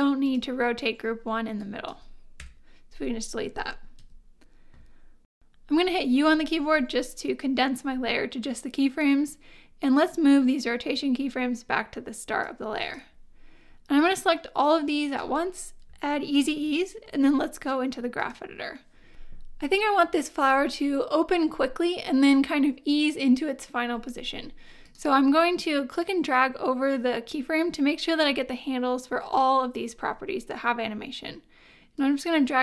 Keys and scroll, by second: 2.4 BackSpace, 4.0 v, 6.5 u, 16.4 F9.